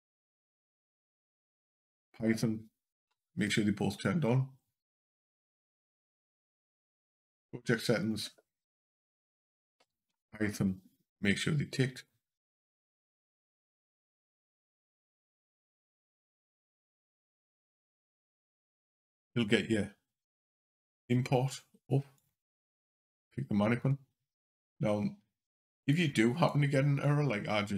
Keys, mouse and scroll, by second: 16.5 click.